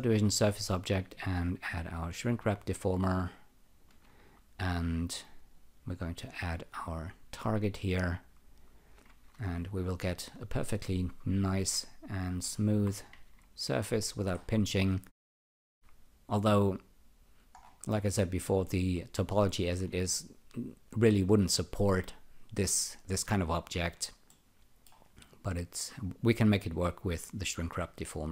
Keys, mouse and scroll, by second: 1.9 shift+click, 9.0 ctrl+r, 11.1 alt+click, 13.1 ctrl+r, 14.1 scroll down 2, 14.7 alt+click, 17.6-18.1 scroll up 5, 20.1 alt+click, 23.0 alt+click, 24.3 alt+middle click.